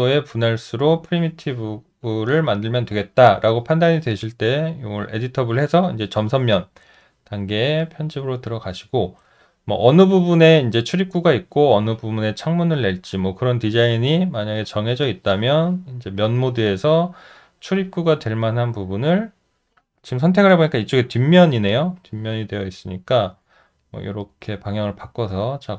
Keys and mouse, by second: 0.2 alt+middle click, 2.0 alt+click, 22.0 alt+click, 23.8 alt+middle click, 24.3 alt+right click, 24.9 alt+middle click, 25.4 alt+right click.